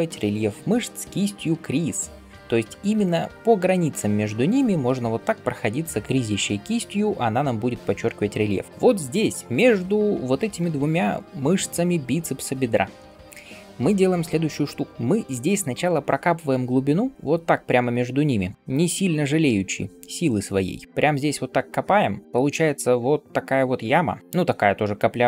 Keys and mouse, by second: 4.9 [, 5.0 [, 8.9-21.3 shift+drag, 8.9-21.3 shift+right drag, 10.5 [, 10.6 [, 22.5 click, 22.5 middle click, 22.5 right click.